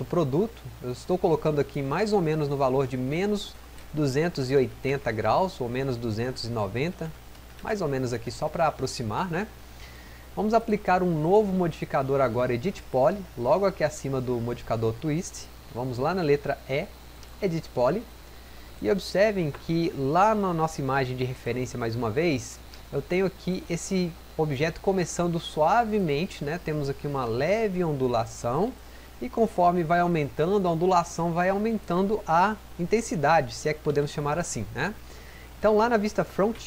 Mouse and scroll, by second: 34.2 click.